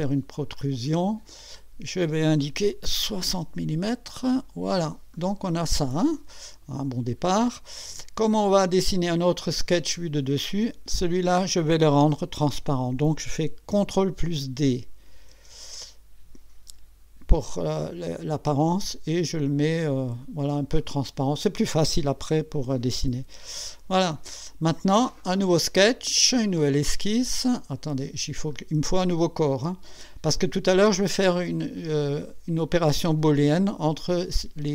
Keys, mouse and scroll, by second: 0.5 click, 2.8-3.8 typing, 4.2 click, 5.1-7.5 drag, 8.4 click, 9.1 right click, 10.9 click, 15.3 ctrl+d, 18.5-20.0 drag, 20.2 click, 20.8-22.0 drag, 23.2 2, 23.8 scroll down 2, 24.3 right click, 26.5 click, 27.7 click, 28.5 click.